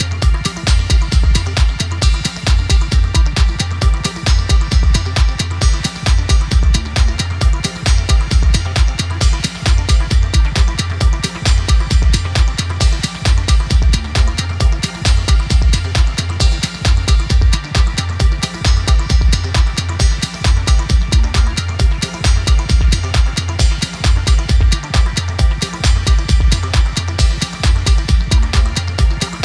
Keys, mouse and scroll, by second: 1.6-2.1 alt+scroll down 1, 3.1-6.7 drag, 7.1-8.6 drag, 9.7-10.4 click, 11.1-11.8 shift+click, 12.1-12.6 shift+click, 13.7-14.9 alt+scroll down 2, 15.1-15.9 shift+click, 15.9-16.7 alt+scroll down 2, 16.7-17.3 alt+scroll down 1, 17.3 alt+scroll up 1, 18.1 click, 20.5 click, 21.5-21.9 alt+scroll up 1, 22.0 space, 22.3 click, 22.4 space, 22.7 alt+scroll up 1, 24.2-27.7 drag.